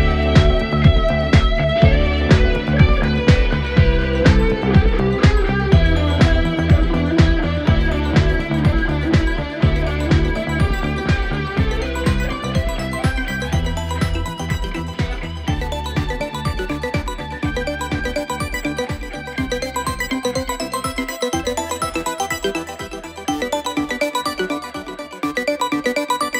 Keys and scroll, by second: 4.5 ., 11.6 ,, 13.8 z, 14.0 ., 14.2 Escape, 14.4 ctrl+z, 14.6 ..